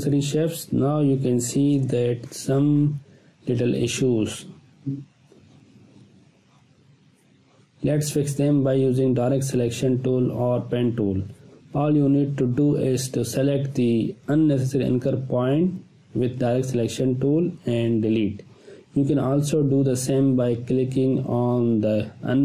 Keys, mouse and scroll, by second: 0.1 Delete, 1.6-1.9 click, 2.2 space, 2.7-3.4 ctrl+click, 4.0 space, 4.2-7.0 ctrl+drag, 8.4-9.0 ctrl+drag, 13.7 click, 15.5 space, 15.6-16.7 ctrl+drag, 20.2 space, 20.4-21.3 ctrl+drag.